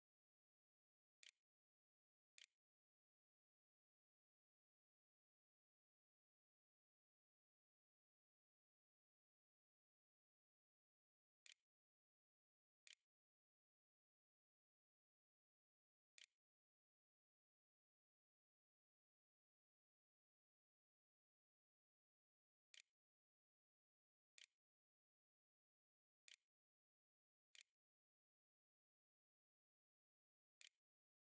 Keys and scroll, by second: 0.0-0.1 typing, 1.7 ctrl+z, 2.1 ctrl+s, 2.7-3.6 typing, 10.4-13.1 typing, 15.1 v, 16.0 e, 16.9 a, 21.3-24.0 typing, 25.1-30.5 typing.